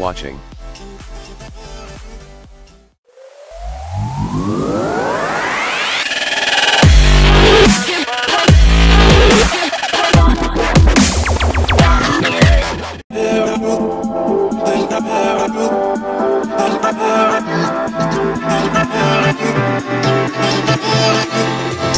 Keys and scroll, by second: 2.7 Escape.